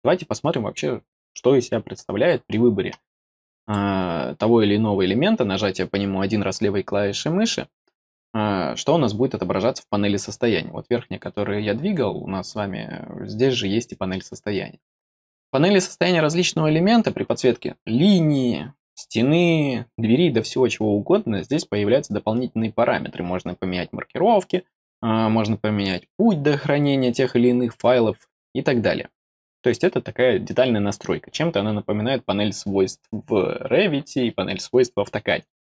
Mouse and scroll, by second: 3.5 click.